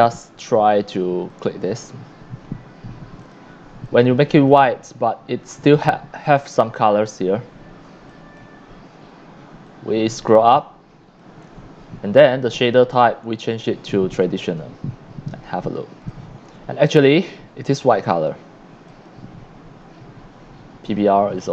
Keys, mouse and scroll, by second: 0.2 c, 1.4 click, 3.2 click, 3.8-4.5 drag, 5.0 scroll up 1, 5.5-6.2 scroll up 3, 8.1 click, 9.7-11.2 drag, 12.5 click, 14.2 click, 16.1-18.2 drag, 16.1 x, 16.6 c, 18.9 click, 20.8 click.